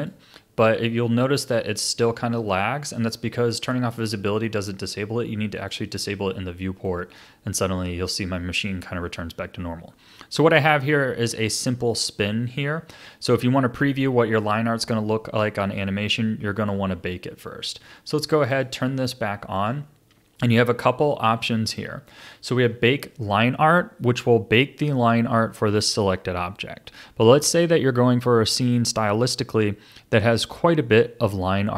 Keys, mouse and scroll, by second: 0.0 click, 2.3 click, 5.6 click, 6.9-9.9 drag, 19.1 click, 19.6 click.